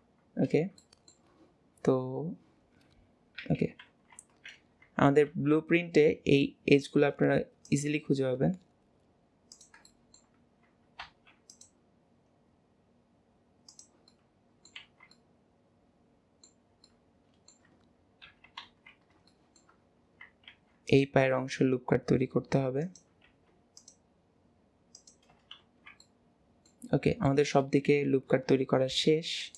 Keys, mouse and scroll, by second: 0.8-3.4 middle drag, 3.4 KP_7, 3.9 alt+z, 5.3 ctrl+r, 9.9 shift+middle click, 10.3-10.9 scroll up 1, 10.9 scroll up 1, 11.0 ctrl+r, 14.1 middle click, 14.9 alt+z, 15.1-18.3 middle drag, 18.3 KP_7, 18.7 alt+z, 19.3 shift+middle click, 26.1 middle click, 27.3 middle click, 27.7 scroll down 2, 27.9-29.4 scroll up 1, 29.4 click.